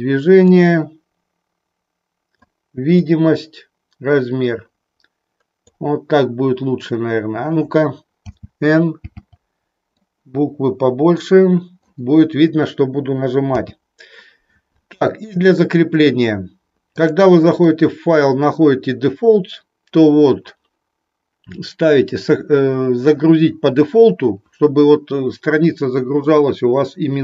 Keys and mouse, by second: 9.8-11.8 drag, 10.2 n, 13.4 n, 16.9-27.2 drag.